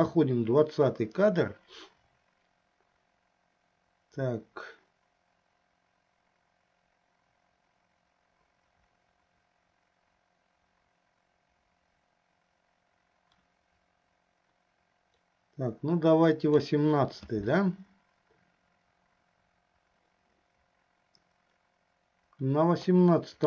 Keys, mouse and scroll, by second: 23.0-23.4 middle drag.